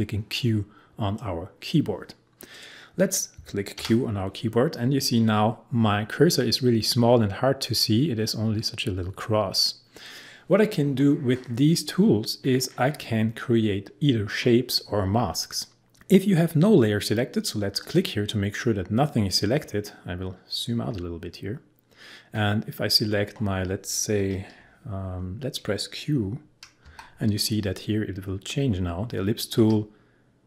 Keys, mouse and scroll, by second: 2.5 click, 3.8 q, 17.8 click, 20.7-22.5 scroll down 1, 26.9 q.